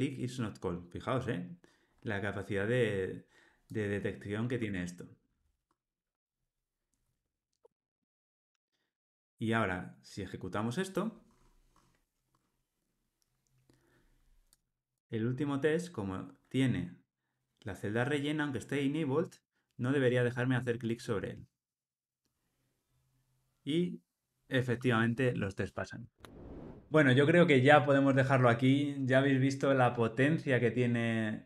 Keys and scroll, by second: 4.6 Tab, 7.6 Tab, 7.9 alt+super+l.